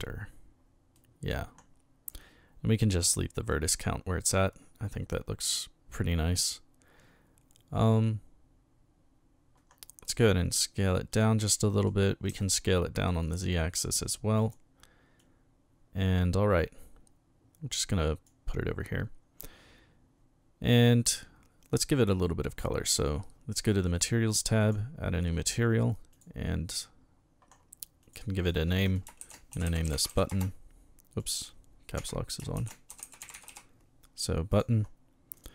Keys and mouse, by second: 1.0 middle click, 3.5-4.2 drag, 5.1-5.5 middle drag, 10.1 s, 11.1 click, 11.5-11.8 middle drag, 12.3 s, 12.4-13.0 middle drag, 14.4 click, 15.2-18.3 drag, 22.9 click, 24.6 click, 26.1 click, 28.0 click, 28.4 click, 28.9-30.6 typing, 31.2 click, 32.0 Caps_Lock, 32.3-34.0 typing, 35.4 click.